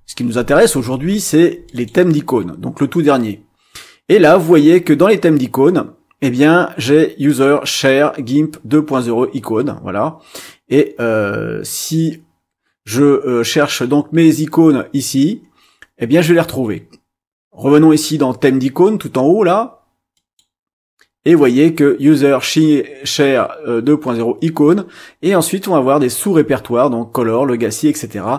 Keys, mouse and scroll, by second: 1.6 click, 7.3 click, 13.0 scroll up 1, 15.7-16.4 scroll up 2, 20.1 click.